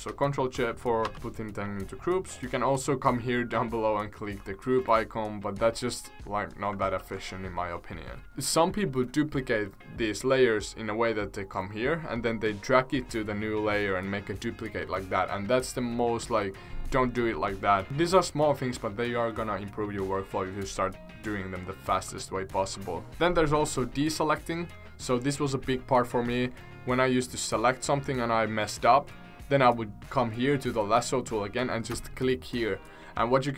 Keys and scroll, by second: 1.0 ctrl+z, 6.9 ctrl+z, 23.1 ctrl+z.